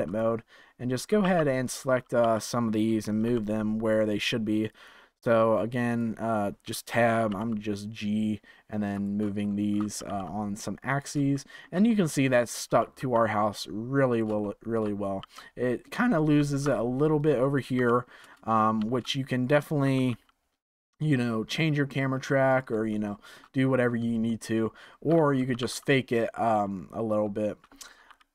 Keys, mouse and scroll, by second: 0.0 click, 1.2 3, 1.6 click, 2.2 g, 5.8 click, 7.1 g, 9.4 shift+middle click, 9.9 g, 11.3 shift+middle click, 12.2 click, 12.6 g, 14.4 shift+middle click, 15.1 g, 17.7 g, 19.8 g, 22.9 shift+middle click, 23.5-24.2 scroll down 1, 24.2-25.5 shift+middle drag, 25.5 g, 27.0-28.1 scroll down 3, 28.1 ctrl+z.